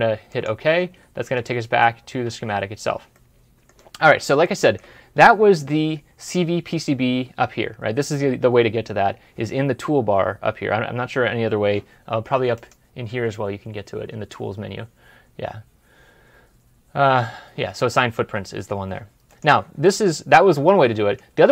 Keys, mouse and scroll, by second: 1.3 alt+Tab, 3.0 middle click, 19.7 middle click.